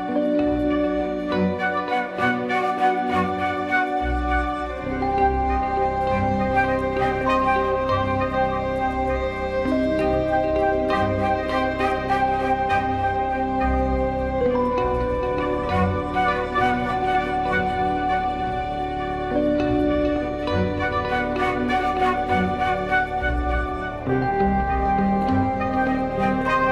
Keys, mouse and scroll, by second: 0.7 r, 1.3 r, 2.7 r, 3.4 r, 4.7 r, 7.7 click, 8.1 r, 11.8 ctrl+z, 12.1-12.9 middle drag, 12.9 drag, 13.4 r, 15.0 r, 17.7 ctrl+shift+z, 17.8 shift+s, 20.3 shift+a, 22.8 click, 23.8-24.3 drag, 24.6 middle drag.